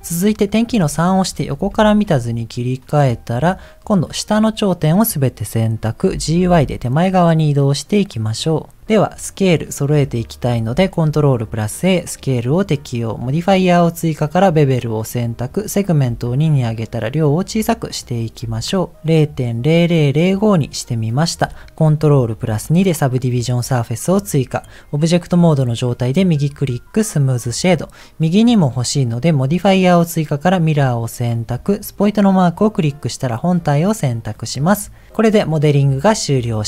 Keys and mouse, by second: 0.9 KP_3, 1.7 Tab, 2.9 click, 3.6 click, 6.0 g, 9.5 click, 10.7 ctrl+a, 15.1 click, 16.3-18.3 shift+drag, 18.6 click, 22.5 ctrl+2, 27.3 middle click, 30.5 click, 34.3 click, 34.6-36.6 middle drag.